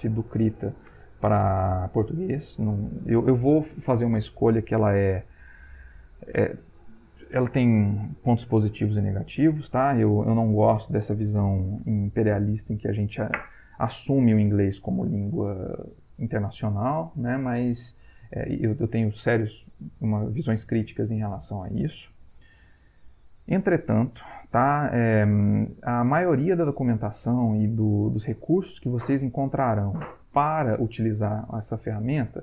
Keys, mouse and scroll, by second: 5.4 click.